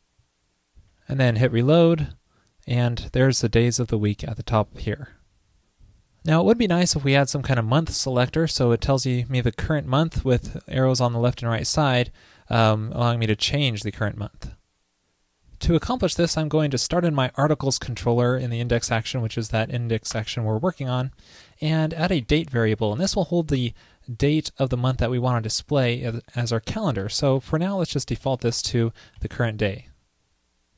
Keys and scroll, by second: 1.4 super+r, 29.2 super+s.